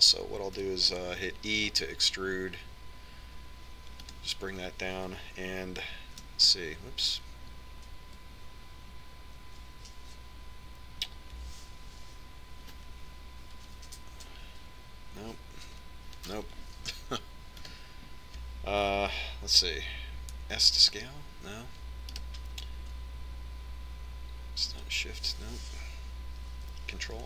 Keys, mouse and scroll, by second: 3.3 e, 7.6 shift+a, 15.3 ctrl+a, 19.4 ctrl+s, 20.9-22.1 drag, 22.1 s, 26.3 shift+a.